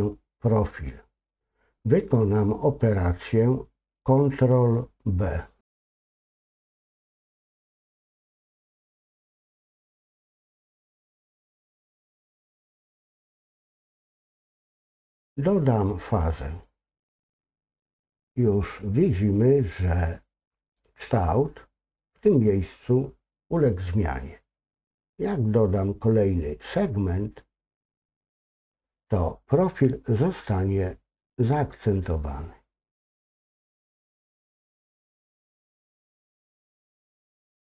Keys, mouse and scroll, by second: 16.7 click, 28.1 click, 35.4-36.4 drag.